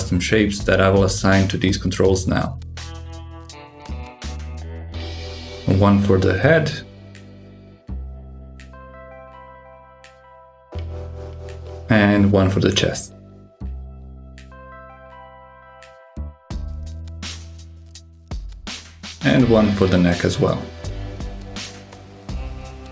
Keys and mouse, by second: 1.9 alt+z, 2.5-3.6 drag, 4.5 click, 5.7-9.2 drag, 10.6 click, 11.5-14.1 drag, 16.6 click, 18.6 click, 19.9-21.5 drag.